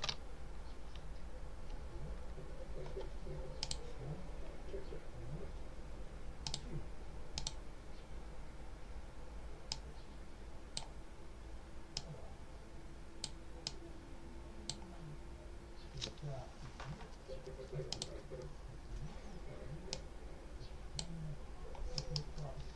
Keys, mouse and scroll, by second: 3.5 click, 6.3 click, 7.3 click, 9.6-10.8 drag, 11.8-13.3 drag, 13.5 click, 17.8 click, 19.8 click, 21.9 middle click.